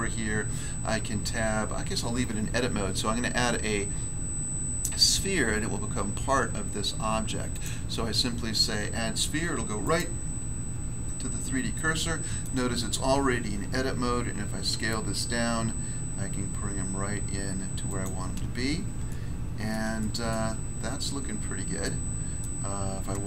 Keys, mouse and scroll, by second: 1.3 Tab, 7.5 click, 7.6 click, 9.8 click, 9.9 click, 11.0 scroll down 1, 11.7 middle click, 12.4 middle click, 14.7 s, 16.8 scroll up 1, 17.8 click, 18.0 click, 18.5-19.0 scroll up 1, 19.0 shift+middle click, 20.6 scroll up 1, 21.8 middle click, 22.4 middle click.